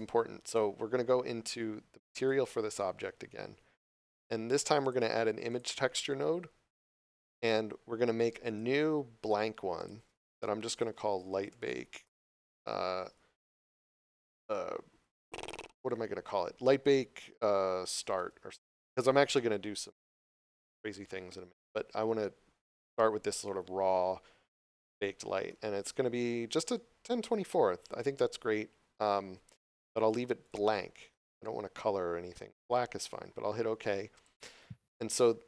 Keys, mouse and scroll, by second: 2.1 right click, 4.1 q, 4.8 click, 8.4 click, 11.1 l, 20.5 Return, 29.6 click, 34.1 click.